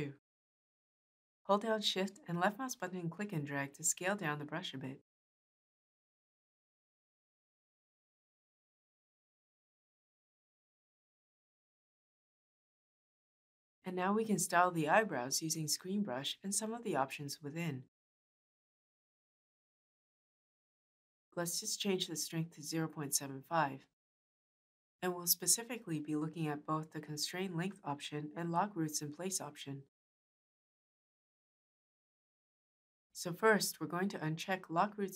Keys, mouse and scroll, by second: 1.3-4.4 shift+drag.